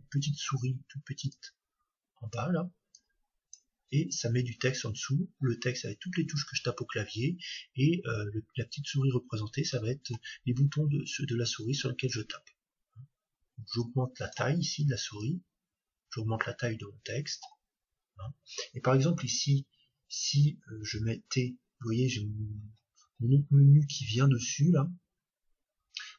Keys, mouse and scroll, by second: 20.9 t.